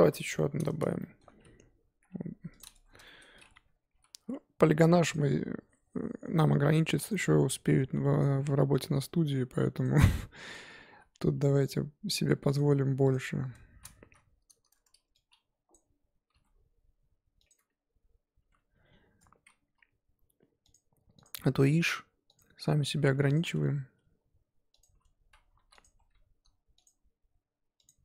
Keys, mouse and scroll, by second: 0.0 KP_1, 0.3 scroll up 5, 1.0-2.6 shift+middle drag, 2.6 click, 2.7 Tab, 3.0 shift+middle click, 3.9 k, 14.0 3, 15.7 click, 16.3 g, 17.5 Tab, 18.2 Tab, 19.7 k, 25.8 click, 26.1-26.8 scroll up 1, 26.8 ctrl+click, 27.8 ctrl+click.